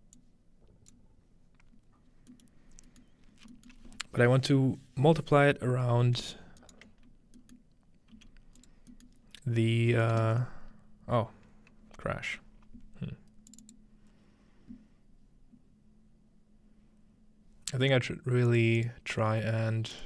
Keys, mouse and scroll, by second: 1.0-2.5 drag, 1.6-2.7 scroll down 1, 2.3 middle click, 2.7 scroll up 2, 3.0-4.5 middle drag, 3.3 scroll down 2, 4.5-5.0 scroll down 1, 6.6 shift+right click, 8.2 g, 8.6 click, 8.9-10.0 drag, 10.2 ctrl+space, 13.5 click, 18.5 click, 18.8 click, 19.9 click.